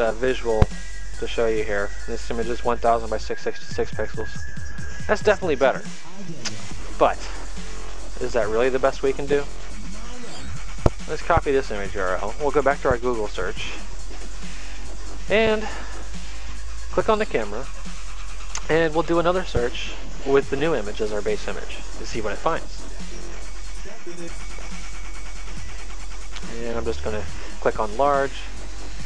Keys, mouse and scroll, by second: 6.7 click, 8.9 click, 11.0 right click, 13.4 click, 16.6 click, 19.4 ctrl+v, 22.0 click, 28.0 click.